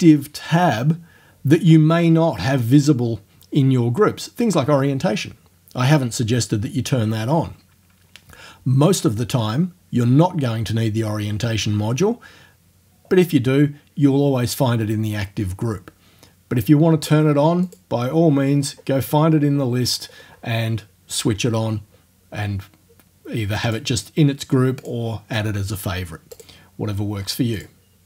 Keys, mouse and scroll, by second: 17.7 click, 18.5-19.3 scroll up 1, 19.4 scroll up 1, 19.5 scroll down 1, 19.7-20.6 scroll up 2, 23.7 click, 24.9 click, 26.4 click, 27.6 click.